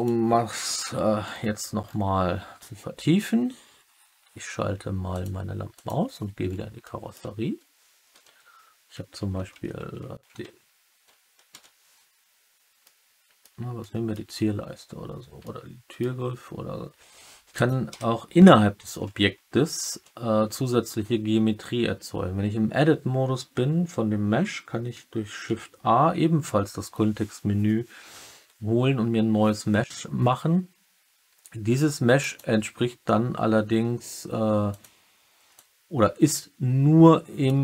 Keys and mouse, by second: 5.0 click, 5.7 click, 6.7-7.1 middle drag, 11.6 KP_3, 12.8-13.3 middle drag, 13.7-14.0 middle drag, 15.4-15.9 middle drag, 17.5 click, 17.8 Tab, 19.9 2, 33.6 s, 34.6 click, 35.6-37.4 drag.